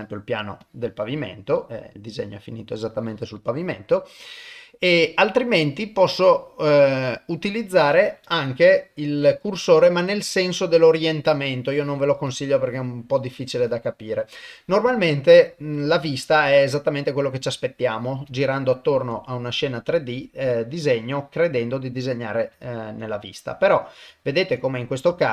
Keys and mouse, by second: 0.0 middle click, 0.6 click, 1.3-2.8 middle drag, 3.4 click, 5.0-11.2 drag, 12.3-14.7 drag, 14.9-17.4 middle drag, 18.3 ctrl+middle click, 19.2 middle click, 20.5 click, 21.6 middle click, 22.6 ctrl+middle click, 23.0 middle click, 24.2 ctrl+middle click, 24.6 middle click, 25.2 shift+middle click.